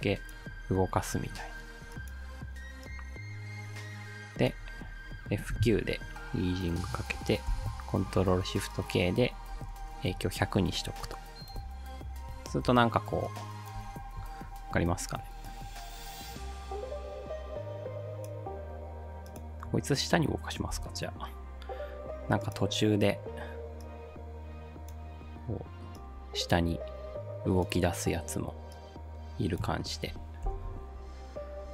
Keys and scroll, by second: 5.5 F9, 7.5 ctrl+shift+k, 9.3-10.3 typing, 11.6 space, 12.7 space, 13.8 space, 20.7 p, 30.4 ctrl+shift+k.